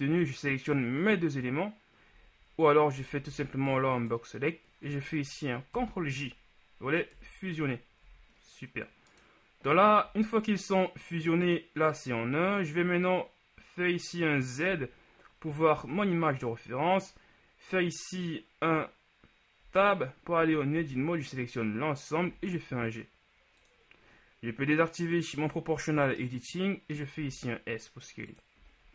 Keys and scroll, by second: 3.5 b, 5.9 ctrl+j, 7.2 KP_1, 8.1 a, 14.9 z, 19.9 Tab, 20.5 a, 20.8 a, 22.3 g, 27.3 s.